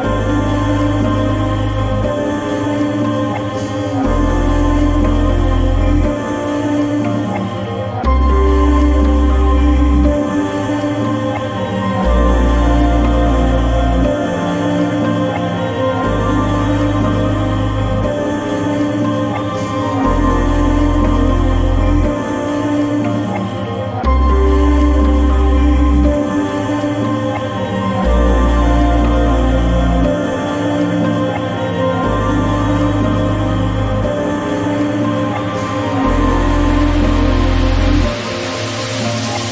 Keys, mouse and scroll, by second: 0.0-1.0 drag, 3.6 click, 4.8-6.6 drag, 8.7-12.5 drag, 14.5 click, 15.8-16.4 drag, 19.1 click, 19.8 click, 22.0-25.6 drag, 26.9-28.4 drag, 28.1 KP_0, 30.5 click, 32.0 click, 33.2 click, 33.9 click.